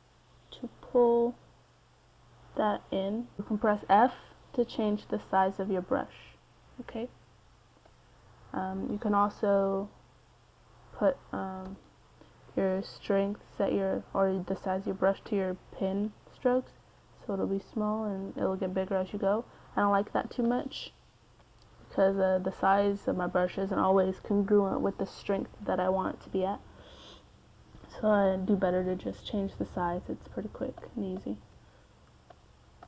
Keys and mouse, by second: 2.1 middle click, 3.0 f, 5.1 f, 11.1 c, 14.2-16.7 drag, 17.5 ctrl+z, 18.4-20.6 drag, 23.5 middle click, 24.1 f, 25.1 middle click, 25.3 middle click, 25.4 middle click, 25.9-27.4 drag, 26.6 f, 29.3-32.7 middle drag.